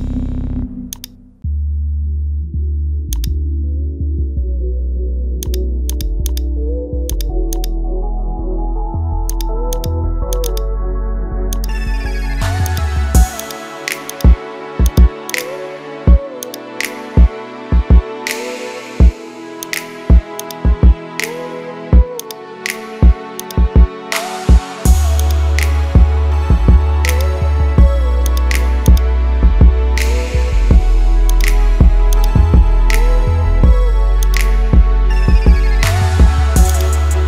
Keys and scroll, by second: 31.8 ctrl+z.